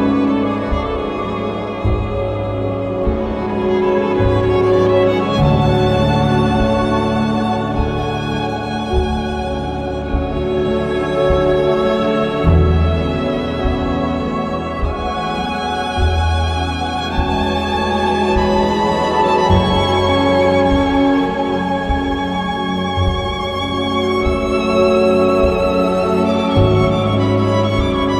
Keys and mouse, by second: 1.6 ctrl+KP_Add, 1.7 ctrl+KP_Add, 2.2 shift+h, 8.3 k, 11.0 click, 11.6 click, 15.4 click, 19.0 click, 19.7 click, 20.6 click, 21.6 click, 22.6 click, 23.5 click, 24.5 click, 26.8 click.